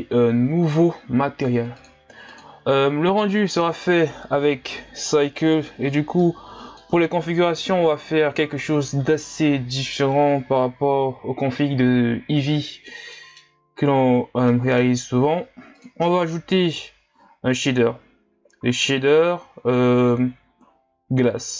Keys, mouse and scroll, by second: 8.6 Delete.